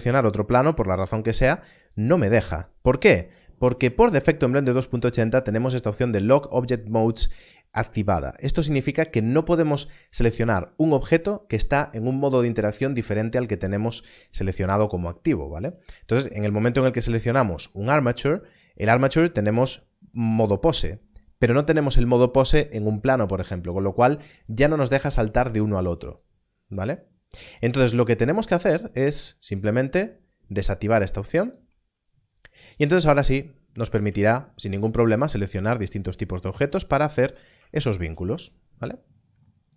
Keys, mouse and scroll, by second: 26.0 click, 28.8 click, 31.4 click, 34.2 shift+click, 36.8 shift+click, 37.8 shift+click.